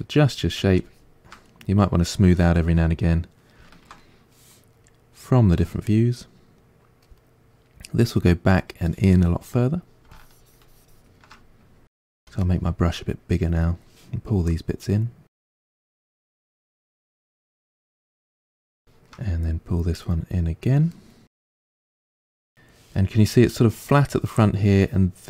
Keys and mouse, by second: 1.5-4.9 middle drag, 4.9-15.9 drag, 12.2 f, 15.9-19.7 middle drag, 19.7-21.8 drag, 21.8-25.2 middle drag.